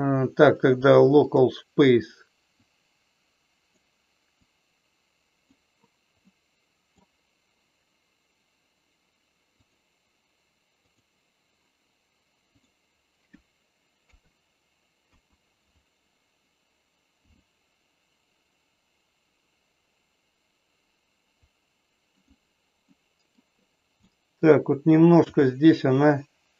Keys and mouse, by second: 2.6-3.7 drag, 4.3-5.4 drag, 6.3 middle click, 9.4-11.1 drag, 14.1 KP_3, 15.1 KP_1, 17.3 r, 22.9 middle click, 24.1 middle click, 25.3 r.